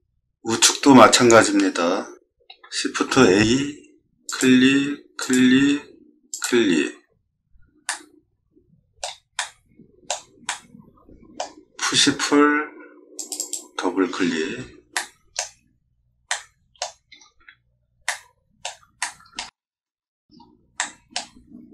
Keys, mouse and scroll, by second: 0.1 middle click, 2.9 shift+a, 4.2 click, 6.3 click, 7.8-9.0 middle drag, 9.4 middle click, 10.5 middle click, 11.9 p, 13.2 click, 13.4 click, 14.3 scroll down 2, 14.9 middle click, 16.3 middle click, 17.1 scroll down 1, 17.4 z, 18.1 middle click, 19.0 shift+middle click, 19.6 middle click, 19.7-20.3 scroll up 3, 20.8 middle click, 21.4 middle click, 21.5 middle click.